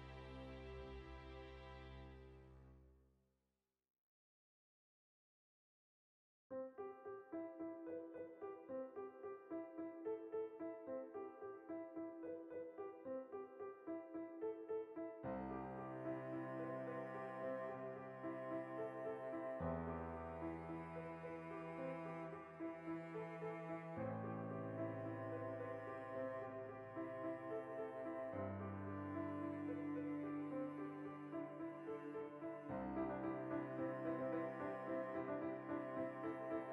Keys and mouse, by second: 0.2 right click, 0.3 ctrl+r, 0.5 right click, 0.7 ctrl+r, 0.9 right click, 1.0 ctrl+r, 1.3 right click, 1.4-4.6 shift+middle drag, 3.8 ctrl+r, 4.6 right click, 5.1 ctrl+r, 5.7 click, 5.8-7.3 middle drag, 6.6 a, 7.6 alt+e, 8.9 shift+click, 9.0 middle click, 9.6 ctrl+z, 9.8 ctrl+middle click, 11.4 alt+e, 14.5 shift+click, 14.5 middle click, 15.0 a, 15.2 s, 15.7 click, 16.0 alt+q, 16.5-18.7 shift+middle drag, 17.9 ctrl+r, 18.7 click, 18.8 ctrl+r, 19.3 click, 19.4-22.2 ctrl+middle drag, 20.3 Tab, 21.2 z, 22.8 Tab, 23.0 ctrl+middle click, 24.1 ctrl+r, 25.0 click, 25.1 middle click, 25.8 ctrl+r, 26.4 click, 26.5 middle click, 26.6 Tab, 26.8 middle click, 28.3 Tab, 28.5 middle click, 28.9 ctrl+r, 29.4 click, 29.5 shift+middle click, 30.2 ctrl+r, 30.7 click, 30.7-36.6 ctrl+middle drag, 32.1 Tab, 36.6 right click.